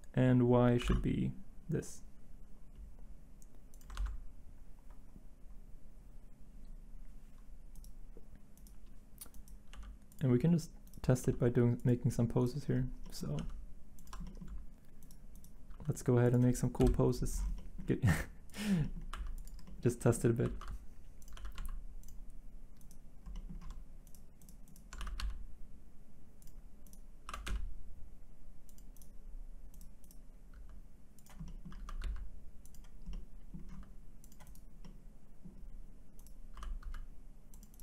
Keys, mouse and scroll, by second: 0.8 r, 0.9 y, 3.9 ctrl+z, 9.7 g, 11.2 g, 13.4 g, 15.7 r, 16.8 Delete, 18.1 r, 19.1 r, 20.4 r, 20.5 z, 21.3 r, 21.5 x, 25.0 r, 25.2 x, 27.3 r, 27.5 x, 30.5 r, 33.7 r, 36.5 r, 36.8 x.